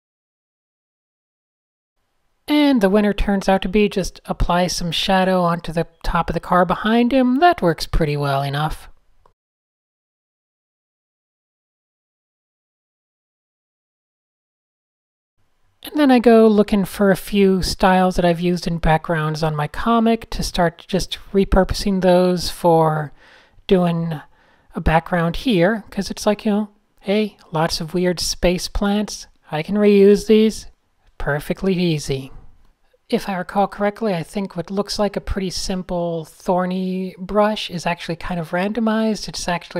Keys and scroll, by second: 2.8 super+z, 3.3 super+z, 6.9 super+a, 7.1-9.2 typing, 9.5 super+-, 9.7 super+-, 13.0-14.2 typing, 15.9 super+s, 24.3 n, 25.2 super+z, 25.3 super+a, 25.5 super+a, 25.9 super+,, 26.4 Return, 26.5 s, 28.6 n, 29.1 Tab, 30.2 Tab, 31.1 Left, 31.4-35.4 typing, 32.5 shift+super+a, 33.1 Tab, 35.5 Tab, 36.6 n, 39.4 Tab.